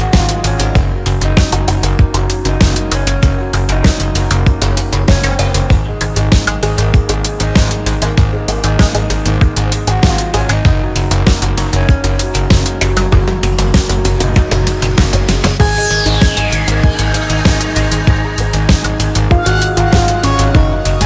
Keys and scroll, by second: 3.4 ctrl+z.